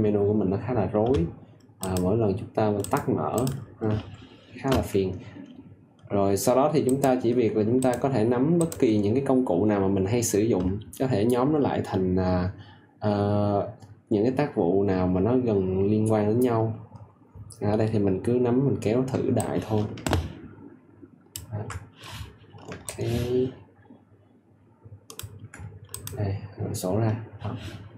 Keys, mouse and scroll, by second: 19.3 ctrl+alt+click, 22.8 ctrl+click.